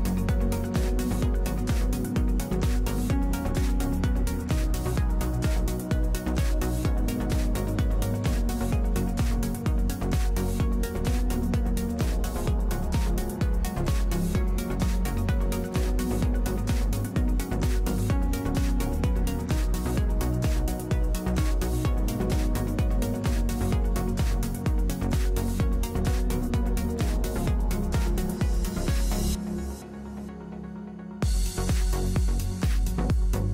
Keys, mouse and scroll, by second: 0.2 KP_3, 0.5 z, 0.5 alt+q, 1.5 z, 3.1 click, 3.3 w, 3.6 e, 6.2 alt+space, 8.4 middle click, 9.2-11.8 middle drag, 9.9 click, 9.9 right click, 13.0 middle click, 14.6 a, 15.6 ctrl+alt+KP_0, 16.0 n, 18.0 middle click, 18.4 middle click, 18.7 w, 23.5 click, 24.2 w, 24.5 w, 24.6 n.